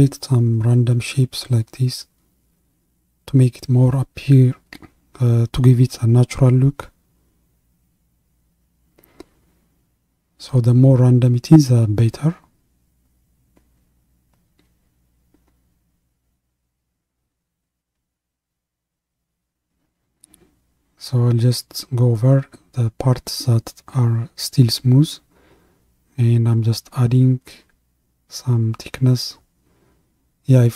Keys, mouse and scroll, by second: 0.0-2.0 drag, 7.5-15.3 drag, 15.3 ctrl+KP_3, 17.6-23.9 drag, 23.9-24.3 scroll up 2, 25.9-28.8 drag.